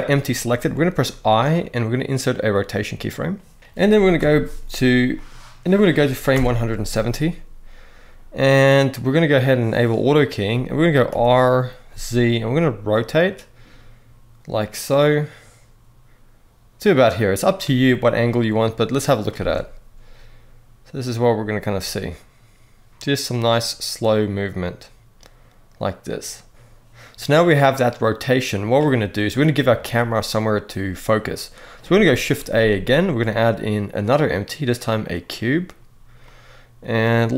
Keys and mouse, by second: 0.8 i, 4.9 middle click, 6.1 shift+Right, 10.8 r, 11.6 z, 17.9-19.0 drag, 19.1 space, 26.8-28.4 drag, 32.1 shift+a, 36.0-37.0 middle drag, 37.2 g.